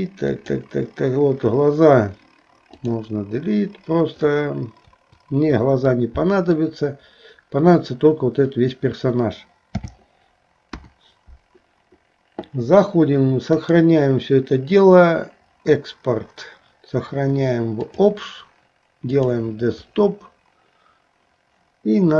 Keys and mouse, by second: 0.3 click, 2.9 click, 5.9 middle click.